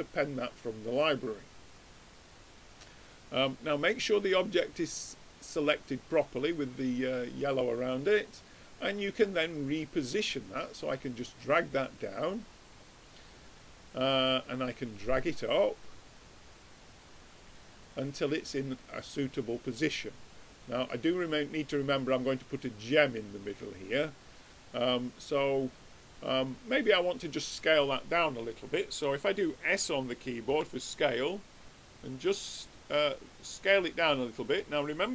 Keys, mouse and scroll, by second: 0.0-1.5 drag, 2.1 middle click, 2.2 middle click, 5.0 click, 6.0-8.0 middle drag, 9.9-11.5 drag, 13.1-15.9 middle drag, 15.9-17.5 drag, 17.3-19.9 middle drag, 19.9-21.6 drag, 22.3-24.6 middle drag, 24.6-26.1 drag, 25.7-30.5 middle drag, 25.7 right click, 30.5 s.